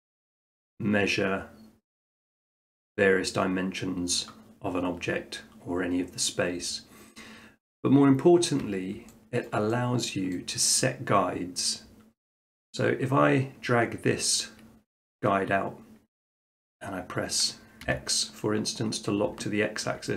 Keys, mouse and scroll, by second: 9.0 click, 9.4 shift+middle click, 10.3 middle click, 17.8 x, 19.8-20.1 shift+middle drag.